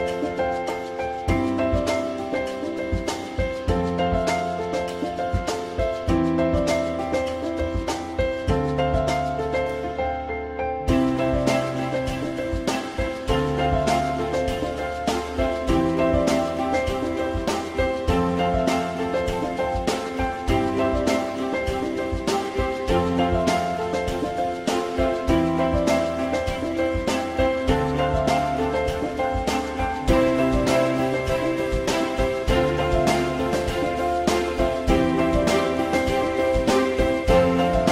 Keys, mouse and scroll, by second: 4.7 F3, 5.4 F3, 6.4 alt+c, 6.8 alt+x, 7.6 alt+middle click, 11.0-12.4 drag, 14.7 click, 15.7 alt+middle click, 17.2 4, 19.2 Delete, 23.0 click, 24.6 right click, 28.7 alt+middle click, 30.1 alt+middle click, 33.9 alt+middle click.